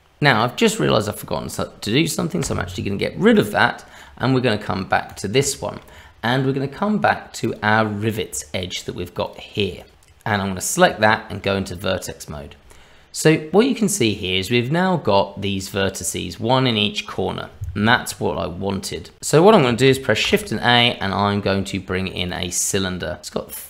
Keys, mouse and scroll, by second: 0.4 click, 2.4 Delete, 3.3 shift+middle click, 4.2-4.7 scroll up 2, 5.1 click, 5.1 scroll up 1, 5.9 middle click, 7.4 click, 8.4 middle click, 9.2-9.9 click, 9.8 click, 10.4-11.4 scroll up 2, 10.8 Tab, 12.2-13.5 scroll down 2, 19.2 click, 19.2 n, 20.2 shift+a.